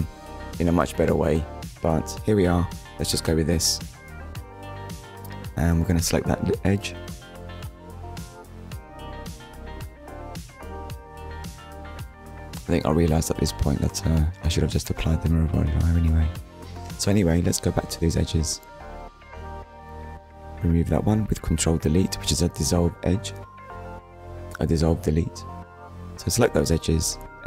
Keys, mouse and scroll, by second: 2.1 click, 3.0 middle click, 3.6 click, 4.2 click, 4.8 middle click, 9.1 scroll up 1, 10.9 click, 12.5 Tab, 13.5 click, 14.0 click, 15.0 Tab, 15.8 middle click, 17.2 click, 18.2 alt+click, 22.7 click, 23.3 shift+click, 24.5 shift+click, 25.9 middle click, 27.2 click.